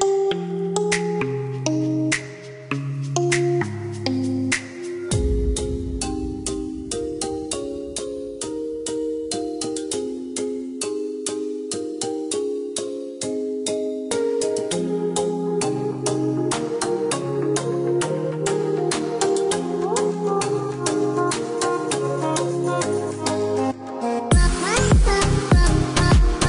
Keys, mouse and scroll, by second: 4.7 click, 6.6 scroll down 1, 8.6 middle click, 10.8 space, 11.9 click, 12.9 click, 18.6 click, 25.6 right click.